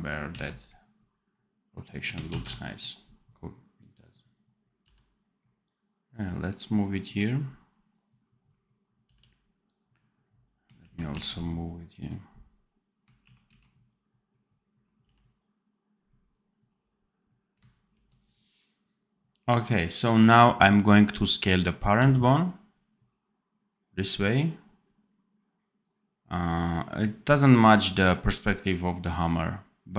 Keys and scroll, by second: 0.2 c, 2.2 ctrl+z, 4.7 v, 9.0 v, 10.7 shift+q, 11.1 shift+a, 12.9-13.9 typing, 14.9 v, 17.7 ctrl+b, 21.9 x.